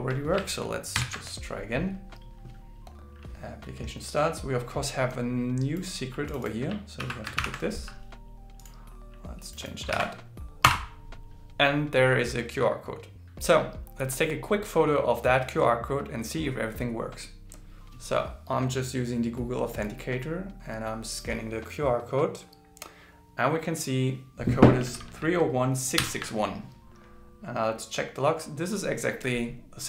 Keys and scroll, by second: 1.0 ctrl+shift+r, 7.0 super+c, 10.9 super+v.